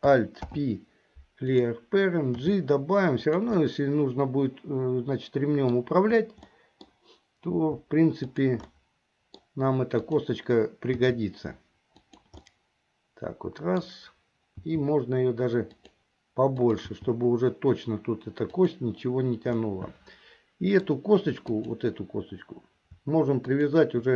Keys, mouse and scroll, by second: 0.4 alt+p, 2.4 g, 3.7-6.0 middle drag, 6.6 middle click, 7.0 scroll down 1, 7.6 g, 8.8 scroll up 1, 8.9 middle click, 10.2 click, 11.1 g, 12.6-14.1 middle drag, 14.8 g, 16.6 click, 17.5 g, 19.7-21.0 middle drag, 21.0-21.7 scroll down 1, 21.7 click, 23.5 shift+click.